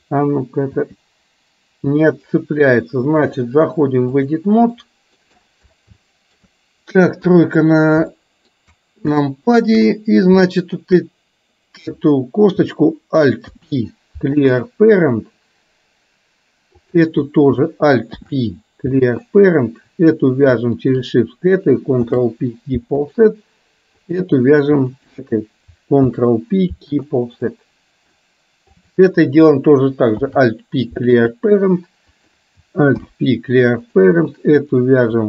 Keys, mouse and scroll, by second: 1.1 g, 3.4-4.5 drag, 4.9 middle click, 6.0 shift+middle click, 7.4 KP_3, 8.3 shift+middle click, 9.1 shift+middle click, 10.6 shift+middle click, 13.5 alt+p, 16.8 click, 18.1 alt+p, 20.9 shift+click, 22.0 ctrl+p, 24.0 click, 25.0 shift+click, 27.1 ctrl+p, 27.5 middle click, 28.9 click, 30.5 alt+p, 32.3 click, 33.0 alt+p, 34.6 click.